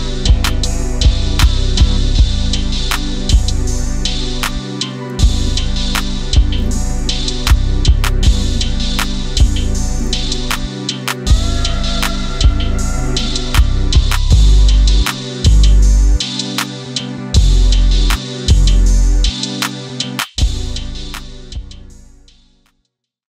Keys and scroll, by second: 5.1 Up, 5.2 Up, 5.3 Left, 6.5 Up, 6.6 Up, 6.7 Up, 7.6-9.0 Up, 9.3 Up, 9.8 shift+Up, 13.2 Up, 13.6 Up.